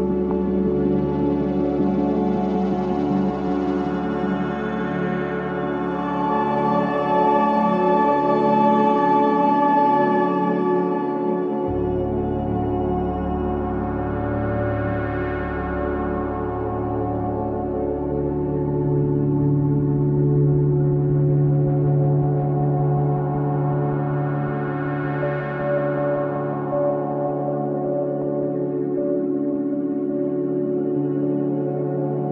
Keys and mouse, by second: 0.4 click, 1.7 click, 4.0 click, 5.9 click, 6.1 click, 9.4 click, 9.6 click, 11.8-14.6 ctrl+alt+drag, 14.9 ctrl+z, 16.7-17.7 drag, 17.8 click, 20.1-26.1 drag, 27.1 click, 27.5 click, 28.8-32.3 drag.